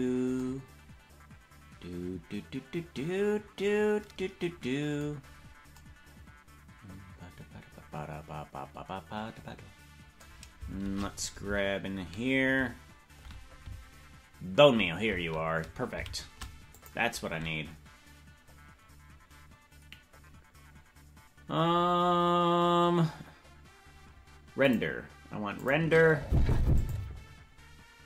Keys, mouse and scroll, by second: 0.0-0.4 scroll up 4, 5.2-5.7 scroll down 1, 5.7 scroll down 2, 11.0 shift+`, 21.6-24.6 scroll down 1, 24.6 click, 25.6 click, 26.7 click, 28.0 click.